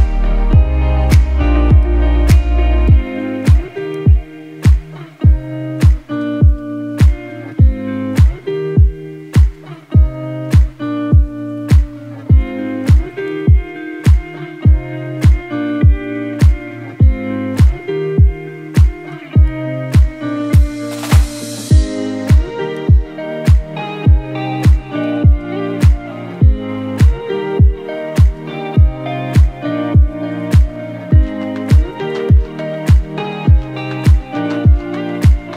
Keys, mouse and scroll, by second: 1.2 Down, 1.7 Left, 3.2 Down, 4.0 Up, 4.3 Right, 6.6 scroll down 1, 7.0 z, 7.2 click, 7.4 space, 7.5 click, 7.7 z, 7.8 click, 10.5-19.4 drag, 20.9 scroll up 1, 21.1-23.1 typing, 21.4 click, 21.8 click, 22.2 click, 22.6 click, 23.0 click, 23.2 click, 28.7-29.2 scroll down 1, 29.2 right click, 31.0-34.8 drag, 34.8 scroll down 1, 35.0-35.5 typing, 35.1 click.